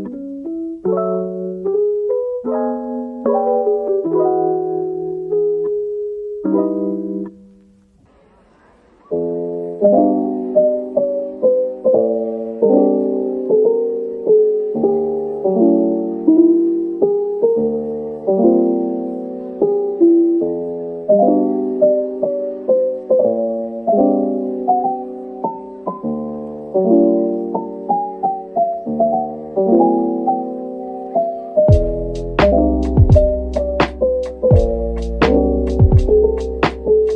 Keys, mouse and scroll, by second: 0.0 ctrl+z, 1.1-1.6 scroll up 1, 1.6-3.2 scroll down 1, 3.3 shift+click, 4.3-5.4 typing, 5.6 middle click, 6.9-7.5 scroll up 1, 7.5 scroll up 1, 7.6 typing, 8.9-9.2 typing, 10.7-12.8 typing, 13.8 middle click, 14.7-15.1 scroll down 1, 15.3 middle click, 16.1-16.5 scroll up 1, 23.1 typing, 23.7 Tab, 24.4-24.9 typing, 33.1-33.5 scroll down 1, 33.5 Tab, 33.7 middle click, 34.2 Tab, 35.2 typing, 36.2 alt+click.